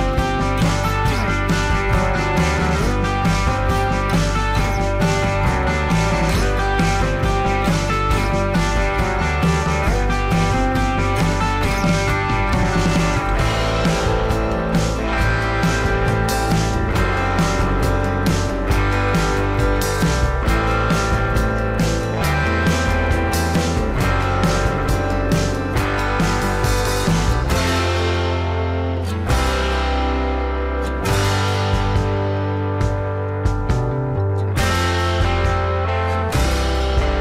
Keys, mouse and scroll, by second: 4.1 alt+scroll up 1, 17.4-17.8 alt+scroll down 1, 17.8 space, 18.6 alt+scroll down 1, 18.9 space, 22.8 alt+scroll up 1, 31.2 alt+scroll down 1.